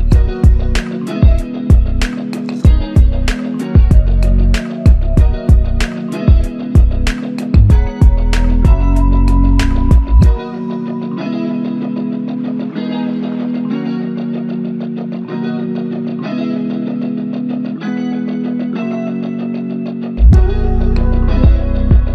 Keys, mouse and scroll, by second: 0.0-0.4 typing, 5.7-6.3 typing, 6.6 alt+click.